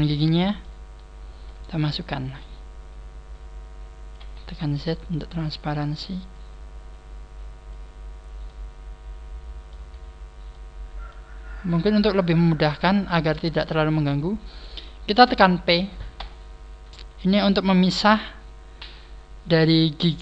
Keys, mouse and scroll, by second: 0.5 shift+middle click, 1.9 shift+middle click, 1.9 click, 4.3 z, 4.6 scroll up 4, 5.2-6.0 scroll up 2, 6.2 click, 6.3 click, 6.3 scroll up 1, 8.0-8.3 scroll up 2, 8.4 middle click, 9.7 z, 9.9-10.4 scroll down 4, 10.5 middle click, 10.5 z, 11.6 click, 13.0 shift+middle click, 13.5 scroll down 2.